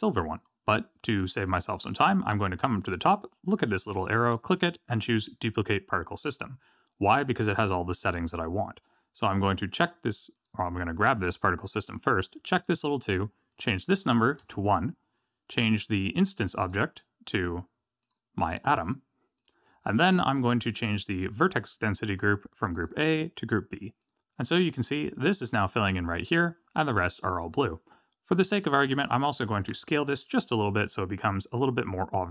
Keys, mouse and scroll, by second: 0.3-1.0 scroll up 7, 1.0 click, 1.8-2.4 scroll up 3, 4.2 click, 10.3 click, 12.5 click, 13.5 click, 15.1-16.6 scroll down 6, 16.6 click, 18.0 click, 20.3-21.1 scroll down 11, 22.1 click, 22.7 click, 24.0 click, 28.5 click, 29.7 s.